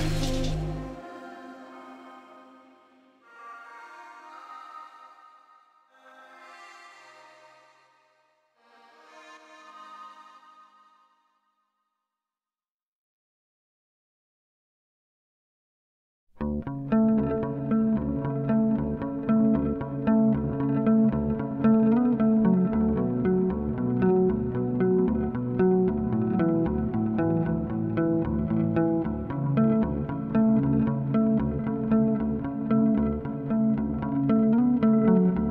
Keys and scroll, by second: 15.2 4, 15.5 s, 19.2 s, 21.3 s, 25.8 ctrl+z, 31.6 s, 32.2 2, 35.4 s.